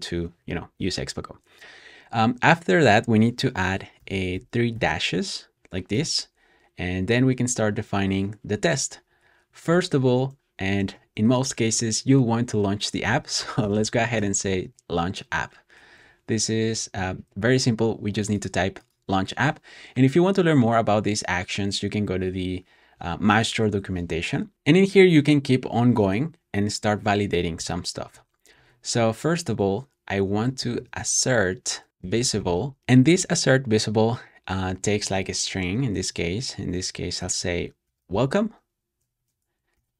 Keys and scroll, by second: 3.9-6.3 typing, 9.3 typing, 10.7 typing, 12.7-14.5 typing, 28.0-33.2 typing, 36.0-39.1 typing, 39.6 super+s.